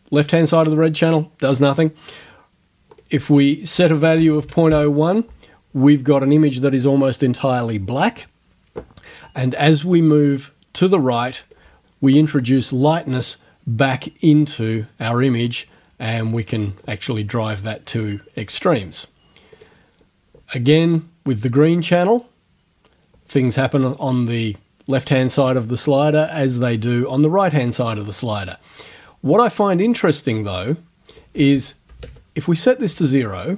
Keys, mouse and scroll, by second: 3.0 click, 4.2 KP_Decimal, 4.3 KP_0, 4.5 KP_1, 4.7 KP_Enter, 9.6-11.8 drag, 14.1-17.0 drag, 19.6 click, 20.7-29.9 drag, 31.1 right click, 31.4-32.0 scroll up 1, 32.0 scroll up 1, 32.0 KP_0, 32.0 KP_Enter.